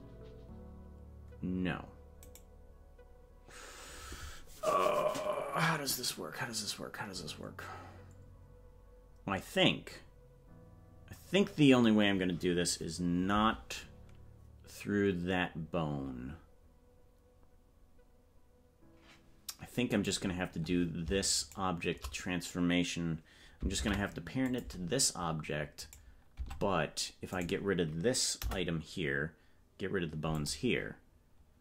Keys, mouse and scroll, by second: 21.5 right click, 23.7 ctrl+p, 25.8 right click, 26.3 Tab, 27.3 right click, 28.3 Delete.